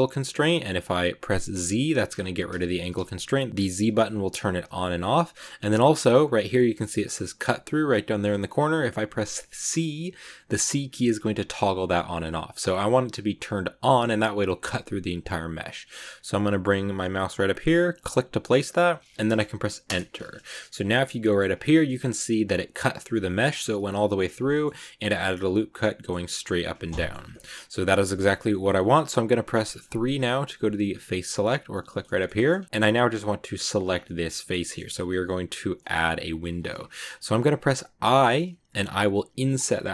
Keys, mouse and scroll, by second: 20.3 scroll down 1, 20.5 middle click, 21.4 z, 21.9-23.3 shift+middle drag, 23.3 right click, 23.8 shift+right click, 24.3-27.1 middle drag, 27.1 scroll down 1, 27.2 shift+middle click, 28.2 scroll up 1, 28.4-29.8 middle drag, 29.8 3, 31.1 click, 31.8 shift+middle click, 32.2-33.5 scroll up 2, 32.2 shift+middle click, 33.5 right click, 33.8 scroll down 2, 33.9-35.9 middle drag, 35.9-36.8 scroll up 1, 36.8-37.9 middle drag, 37.9 i.